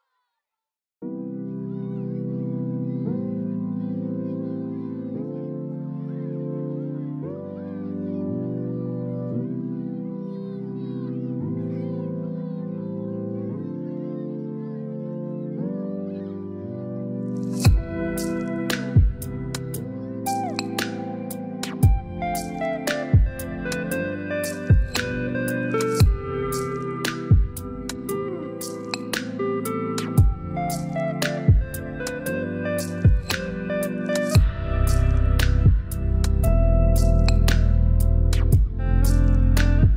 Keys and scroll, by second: 25.9 2, 38.2 1.